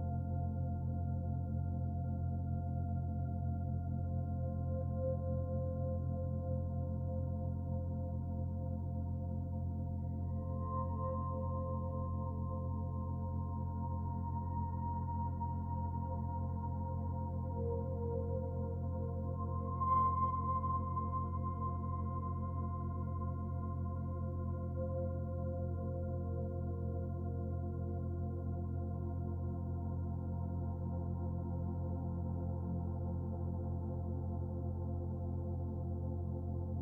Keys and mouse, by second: 0.0-1.0 middle drag, 1.1 Tab, 3.7 alt+z, 6.5 click, 8.4 alt+z, 9.2 click, 10.2 shift+click, 12.0 g, 19.3 click, 21.7 s, 24.4 Tab, 24.9 Tab, 25.9 Tab, 26.4 Tab, 28.9 alt+z, 29.5 click, 31.4 3, 31.9 click, 32.7-33.8 middle drag, 34.2 shift+click, 34.8-36.0 middle drag.